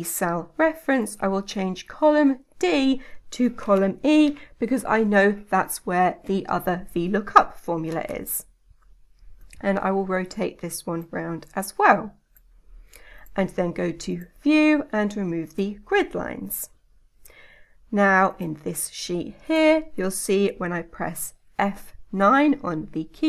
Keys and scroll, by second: 22.4 F9.